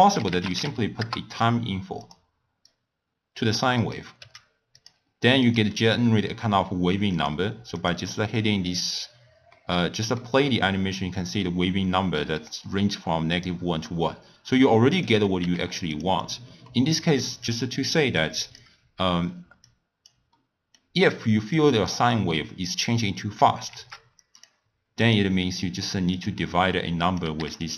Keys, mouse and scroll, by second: 2.7 drag, 3.7 click, 4.2 w, 7.2-8.4 drag, 9.5-12.6 middle drag, 13.3 click, 14.5 click, 15.4 g, 16.2 click, 16.7 middle click, 17.4 click, 18.2 click, 19.7 click, 20.3-21.5 middle drag, 21.5-23.9 drag, 23.9 shift+d, 25.0-27.6 drag.